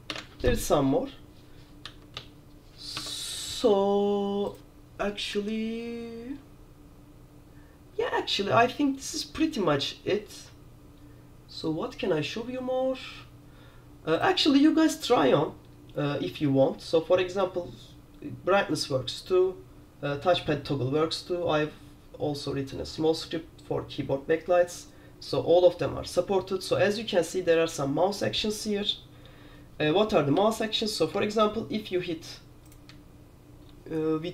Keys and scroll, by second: 0.2 super+`, 1.9 a, 3.1 Escape, 30.5 q.